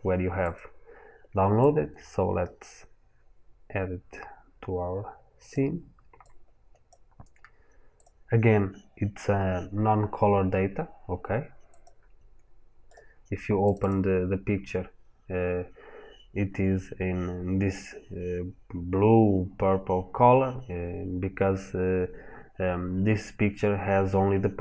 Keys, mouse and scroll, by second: 3.1-5.3 scroll down 1, 6.0 click.